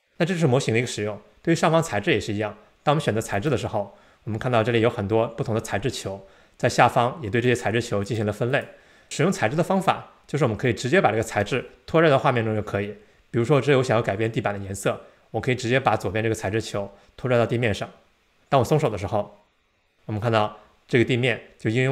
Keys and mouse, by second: 3.4 click, 7.5 click, 8.6 click, 16.6-19.5 drag.